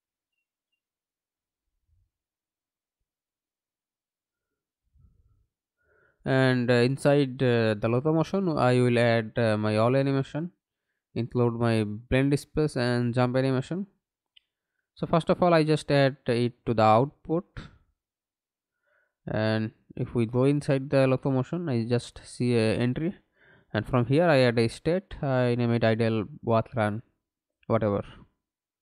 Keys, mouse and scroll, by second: 0.3-3.6 typing, 6.5 double click, 8.6 right click, 9.6 right click, 12.7 right click, 13.0 ctrl+x, 17.8 double click, 18.9 right click, 25.4 shift+i, 26.3 l, 28.2 w.